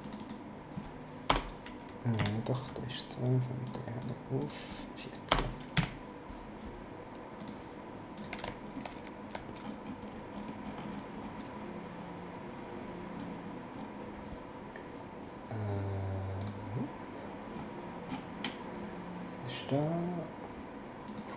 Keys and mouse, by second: 1.3 BackSpace, 2.2 KP_2, 3.6 click, 5.3 BackSpace, 5.7 KP_4, 7.4 click, 16.4 click, 21.1 click.